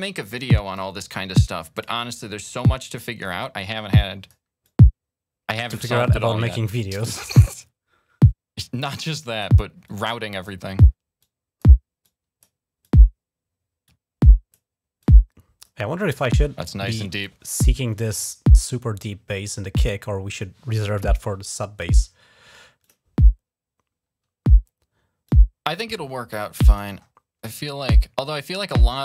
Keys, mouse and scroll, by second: 0.1 click, 0.7-1.3 scroll up 1, 1.5 click, 3.2 click, 4.4-5.8 drag, 5.9 scroll up 2, 6.5-7.2 scroll up 6, 7.4-9.2 drag, 9.6 click, 11.0 click, 11.8 click, 12.6-14.3 drag, 14.8 click, 15.6 click, 19.1-19.7 scroll down 4, 19.7 scroll up 2, 21.9 scroll up 2, 22.6 click, 25.1-26.6 drag, 26.8-27.1 scroll up 2, 28.2 click, 28.7 scroll up 2.